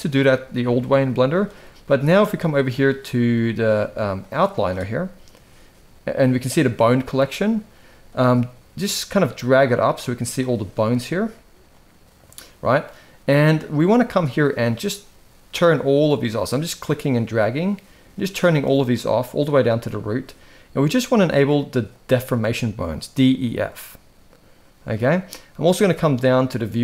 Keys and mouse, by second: 0.0-1.2 drag, 4.0 click, 9.7 click, 11.5-13.0 drag, 14.4 click, 21.6 click.